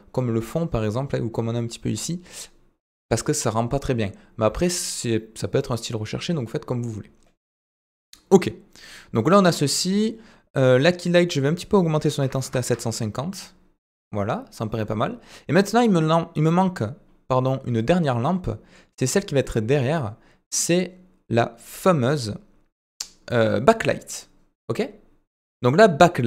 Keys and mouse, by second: 9.9 click, 11.4-13.3 drag, 13.0 typing, 17.3-18.7 middle drag.